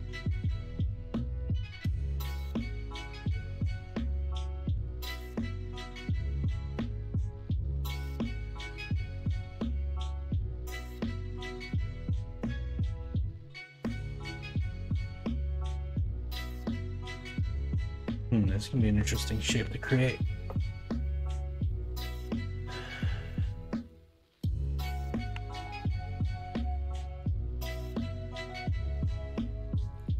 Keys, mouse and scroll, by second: 2.5 Tab, 3.3 middle drag, 5.2 Tab, 13.7 middle click, 15.0 KP_1, 15.3 KP_3, 15.6 alt+z, 27.6 ctrl+r.